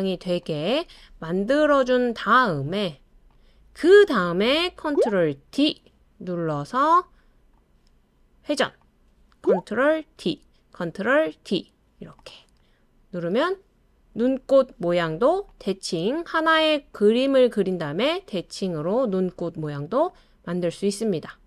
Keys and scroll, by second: 5.5 super+d, 10.2 super+d, 11.3 super+d.